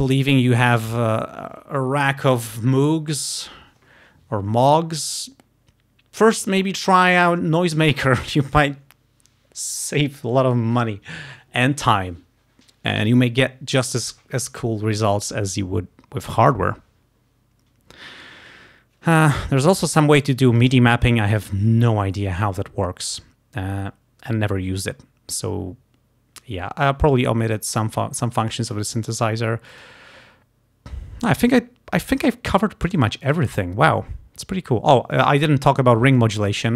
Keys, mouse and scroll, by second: 0.5 click, 1.0 click, 20.3 click, 20.6 right click, 21.1 click, 27.1 click, 28.7 click, 29.7 click, 33.0 click, 36.3 click.